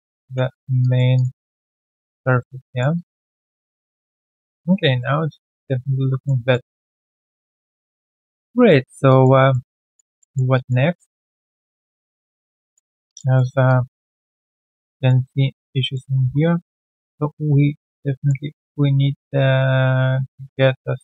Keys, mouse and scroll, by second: 0.2 3, 0.4-0.7 scroll down 1, 0.7 3, 0.8 alt+click, 1.1 alt+click, 1.3 alt+click, 1.7 alt+right click, 1.9 alt+click, 2.6 alt+middle click, 2.9 alt+click, 5.1 alt+right click, 5.4 alt+middle click, 5.7 alt+click, 6.6 scroll down 1, 7.0 alt+click, 7.3 alt+right click, 7.8 alt+middle click, 8.2 alt+click, 8.6 alt+middle click, 9.0 alt+click, 9.5 alt+middle click, 9.8 alt+click, 10.1 alt+middle click, 10.5 alt+click, 10.9 alt+middle click, 11.6 3, 12.0 alt+click, 13.0 alt+click, 13.3 alt+middle click, 13.6 alt+click, 14.1 alt+middle click, 14.3 alt+click, 14.6 alt+right click, 14.9 alt+click, 15.9 alt+middle click, 16.5-17.1 typing, 17.8 alt+click, 18.1 alt+middle click.